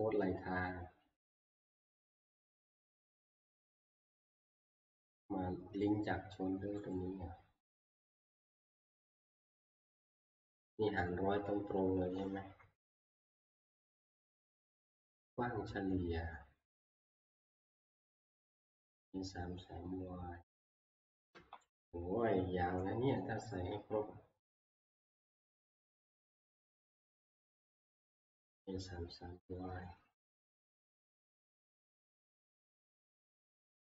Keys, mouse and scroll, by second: 1.2 scroll, 1.7 scroll, 4.1 click, 6.9 click, 8.5 click, 8.7 click, 9.9 click, 20.4 Right, 20.7 Right, 20.9 Right, 21.3 Right.